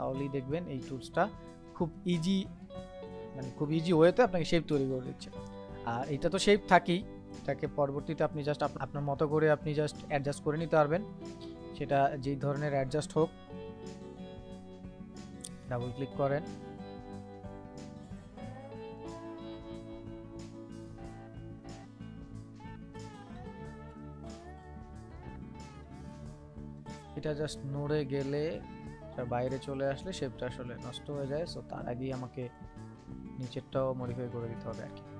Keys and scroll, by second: 27.8 ctrl+z.